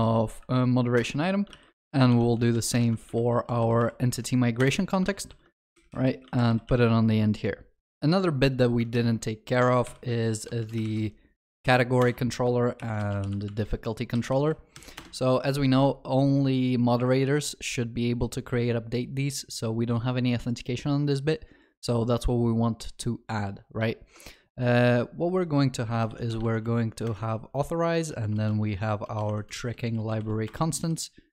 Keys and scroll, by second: 3.1 ctrl+d, 5.0 Return, 5.3 ctrl+w, 6.2 ctrl+c, 6.5 ctrl+w, 6.7 ctrl+v, 6.7 ctrl+s, 9.9 ctrl+shift+n, 27.1 Return.